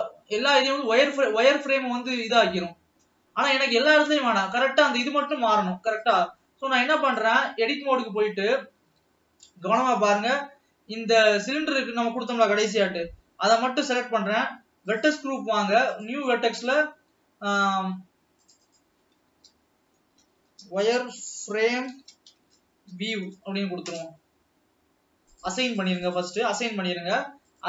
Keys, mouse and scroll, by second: 0.2-1.0 scroll up 7, 1.7 scroll up 3, 3.2-3.7 scroll down 5, 6.4-7.7 drag, 8.3 Tab, 11.8 alt+a, 12.5 l, 13.7 l, 15.4 click, 16.3-22.2 drag.